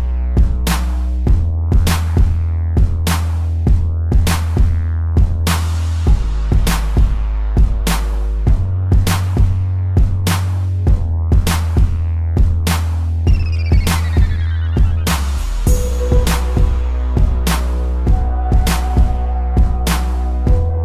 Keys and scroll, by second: 3.7 space, 5.4 space, 11.4 space, 12.1 ctrl+=, 17.9 space.